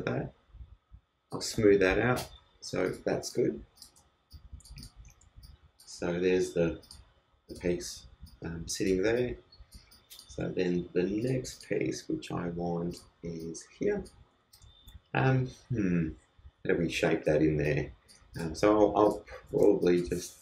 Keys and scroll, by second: 19.6 super+t.